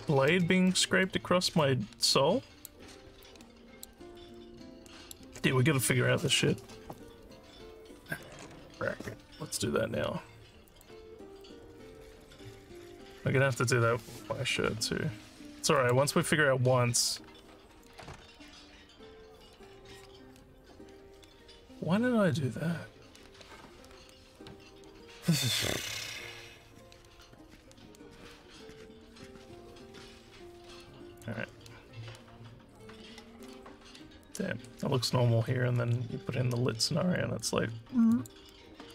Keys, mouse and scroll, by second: 0.7 alt+middle click, 1.6-2.7 alt+drag, 3.3 alt+click, 4.4 alt+middle click, 10.7 click, 15.8 click, 38.1 click.